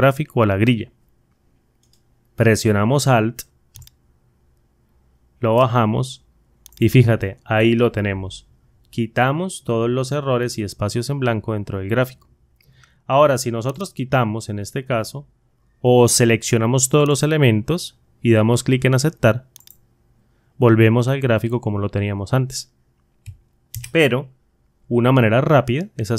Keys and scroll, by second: 23.6 ctrl+z.